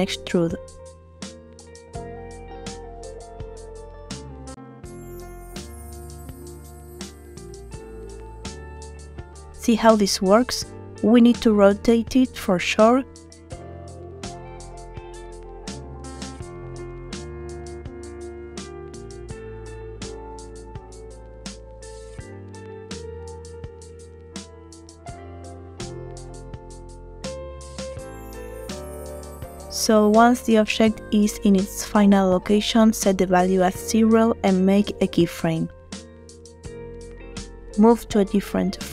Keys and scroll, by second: 1.1 e, 5.8 Tab, 20.0 9, 20.1 0, 20.3 Return, 36.0 |.